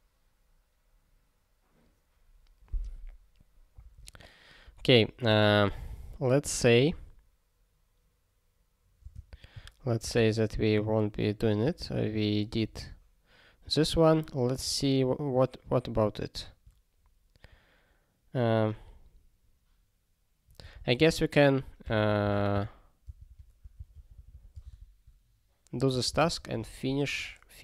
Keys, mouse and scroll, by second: 4.8 ctrl+g, 5.6 ctrl+g, 6.8 ctrl+p, 9.0 ctrl+space, 9.2 ctrl+n, 9.5 ctrl+w, 10.4 ctrl+s, 10.6 ctrl+p, 11.6 ctrl+n, 12.5 ctrl+p, 12.7 ctrl+e, 13.7 ctrl+n, 13.9 ctrl+a, 14.5 ctrl+space, 14.6 ctrl+e, 20.6 ctrl+g, 20.7 ctrl+a, 21.0 ctrl+space, 21.1 ctrl+e, 21.8 ctrl+g, 22.1 ctrl+a, 22.2 ctrl+n, 22.6 Return, 23.0 ctrl+n, 23.3 ctrl+k, 23.9 ctrl+s, 24.0 ctrl+p, 24.1 ctrl+p, 24.3 ctrl+p, 24.5 ctrl+space, 24.6 ctrl+e, 25.9 ctrl+g.